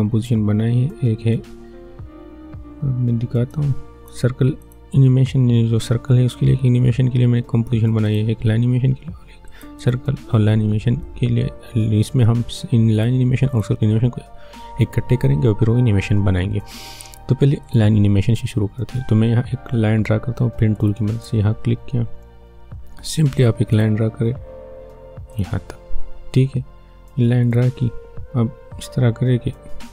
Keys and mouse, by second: 3.5 click, 8.1-12.9 drag, 17.6 click, 20.8 click, 23.7 click.